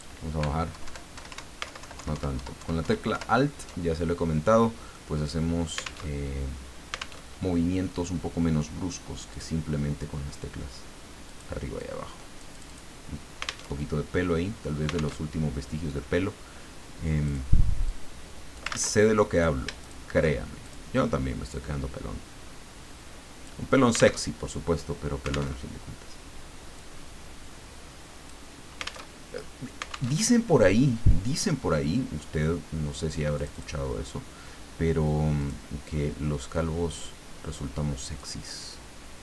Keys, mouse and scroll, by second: 0.7 Down, 1.1 Up, 1.7 alt+Down, 4.9-6.0 drag, 6.1 alt+Tab, 7.2 alt+Tab, 9.3 click, 11.2-13.0 drag, 13.6 alt+Tab, 15.2 alt+Tab, 17.2 click, 17.9-18.9 drag, 18.7 ctrl+z, 19.3 click, 19.8 shift+click, 20.6 shift+click, 21.5-23.6 drag, 24.2 alt+Tab, 25.5 alt+Tab, 26.8-28.4 drag, 29.1 alt+Tab, 30.1 alt+Tab, 33.4 click, 35.4 click, 38.2 click.